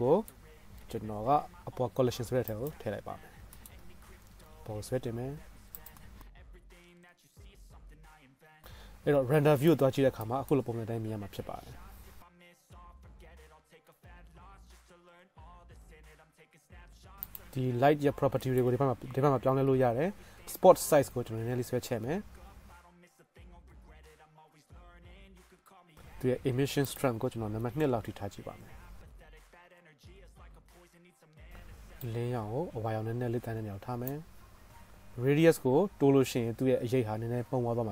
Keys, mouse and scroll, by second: 1.1 m, 4.3 g, 6.6 g, 7.2 middle click, 7.4 shift+click, 7.6 middle click, 8.4-9.4 drag, 8.6-14.0 middle drag, 8.6-9.4 right drag, 12.4 g, 12.8 click, 12.8 right click, 14.0-17.2 right drag, 14.2 g, 15.5 g, 16.3 g, 17.2-17.6 drag, 17.6-31.5 middle drag, 19.6-22.7 drag, 19.6-22.7 right drag, 30.4 KP_0, 31.5-34.6 right drag, 34.6 click, 34.9-37.9 middle drag, 35.3-37.2 drag, 35.3-37.2 right drag.